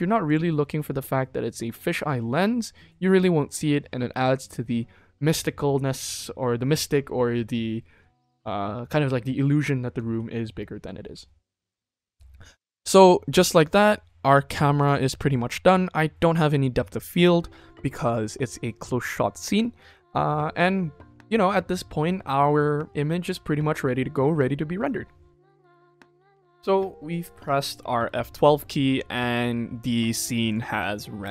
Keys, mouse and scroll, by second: 0.2 click, 10.0 ctrl+s, 14.7 click, 15.6-17.4 scroll down 4, 30.4 click.